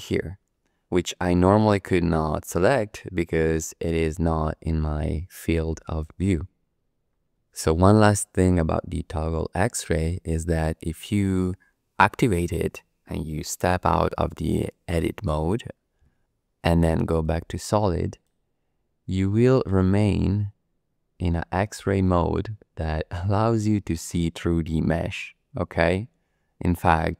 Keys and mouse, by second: 4.1 click, 15.3 Tab, 17.1 click, 18.1 click, 19.7-27.1 middle drag.